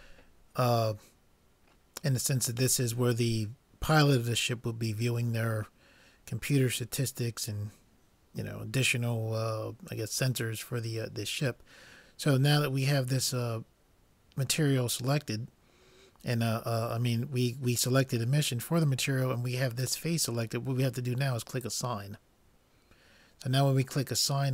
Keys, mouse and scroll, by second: 21.6-23.4 drag.